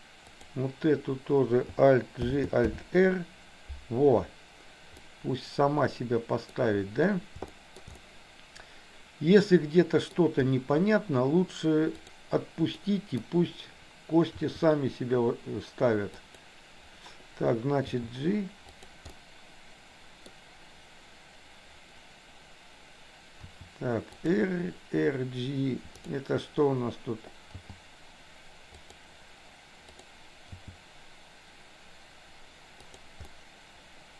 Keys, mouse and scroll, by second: 0.4 click, 2.3 alt+g, 2.6 alt+r, 5.0-6.5 middle drag, 7.5 shift+middle click, 8.0-10.3 middle drag, 11.9 click, 12.9 middle click, 14.4 r, 17.9 g, 19.1-20.4 middle drag, 23.5 r, 25.9 click, 27.6 g, 29.9 click, 30.5 g, 33.3-34.1 middle drag.